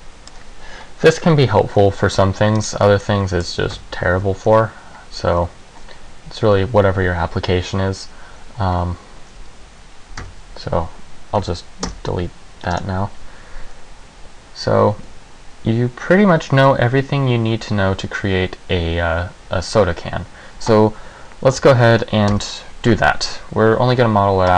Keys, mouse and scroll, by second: 2.8 right click, 3.2 middle click, 3.9 Tab, 4.3 a, 4.5 a, 10.4 Tab, 11.5 Delete, 22.4 KP_1.